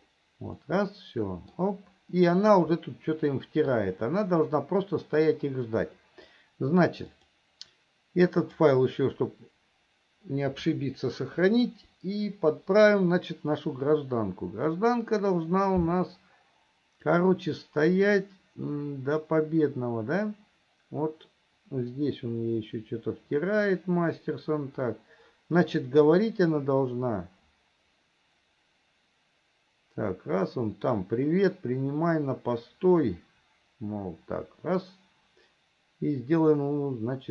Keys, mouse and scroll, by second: 0.9-2.0 middle drag, 3.0-4.1 middle drag, 7.3-9.4 drag, 17.5-37.3 drag.